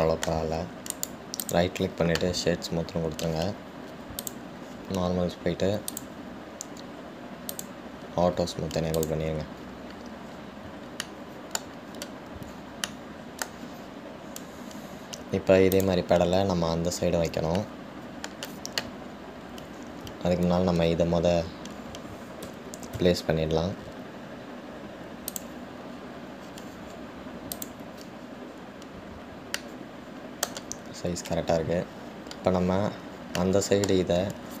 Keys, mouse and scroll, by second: 0.0-1.0 scroll down 2, 1.0-1.7 shift+middle drag, 1.7 scroll down 2, 2.1-5.4 right drag, 5.4 click, 5.9-6.6 scroll down 1, 7.1-8.9 drag, 10.2 click, 11.5-11.9 scroll down 2, 12.2-14.9 shift+middle drag, 14.9-15.6 scroll down 2, 17.0 click, 17.7 scroll up 2, 18.0-18.6 scroll down 1, 18.7 scroll down 1, 18.8-20.3 middle drag, 20.3 scroll up 2, 23.7 g, 27.1 scroll up 2, 27.7 scroll down 2, 28.7 click, 29.4-30.7 scroll down 2, 30.8-33.8 middle drag, 33.9-34.6 scroll down 2.